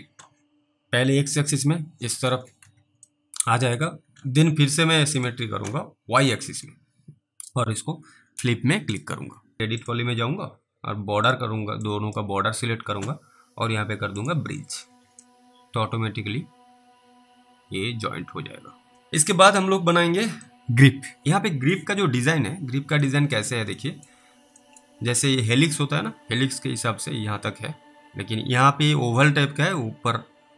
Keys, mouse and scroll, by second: 2.3 alt+w, 2.7 alt+w, 3.4 alt+middle click, 5.2 click, 9.6 alt+middle click, 9.8 click, 14.2 click, 15.5 alt+middle click, 18.9 scroll down 1, 19.3 middle click, 19.4 scroll down 1, 20.3 middle click, 22.5 scroll down 1, 23.3 middle click, 24.0 middle click, 24.0-24.5 scroll down 2, 24.9 middle click.